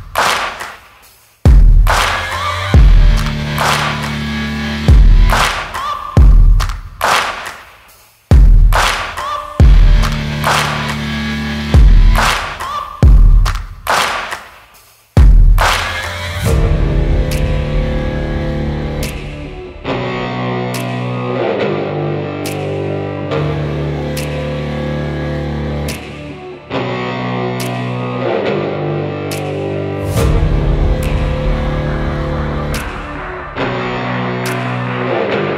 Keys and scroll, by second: 3.6 ctrl+z, 4.7 ctrl+-, 5.5 ctrl++, 10.9 ctrl+a, 11.1 ctrl+c, 12.0 ctrl+v, 13.2 ctrl+a, 21.8 ctrl+a, 25.8 ctrl+a, 27.0-28.0 typing, 31.6 ctrl+z, 33.5 ctrl+t, 34.8 Return.